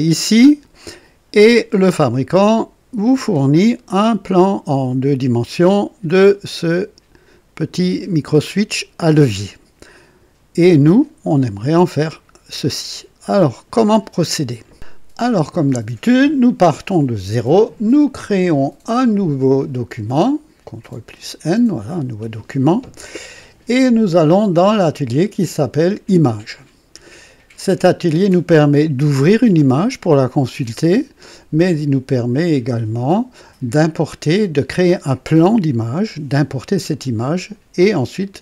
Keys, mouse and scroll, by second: 10.9 click, 20.8 click, 24.2 click, 26.3 click.